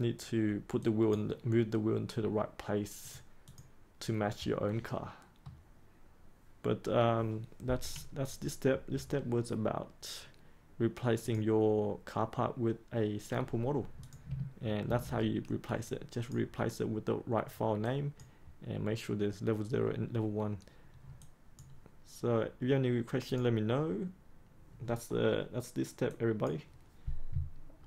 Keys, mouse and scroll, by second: 4.7-6.3 middle drag, 11.1 click, 12.4 click, 14.8 ctrl+s, 15.8 click, 21.5 click.